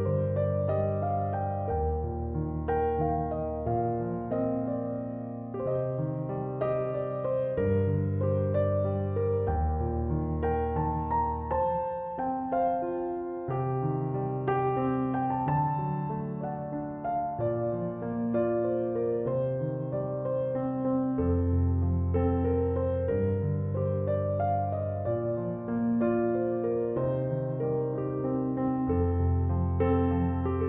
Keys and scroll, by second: 9.1 Return.